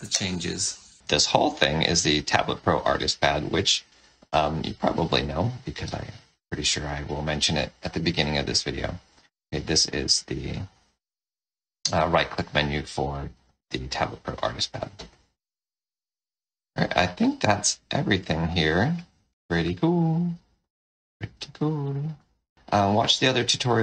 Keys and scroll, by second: 1.0 Escape, 17.4 space.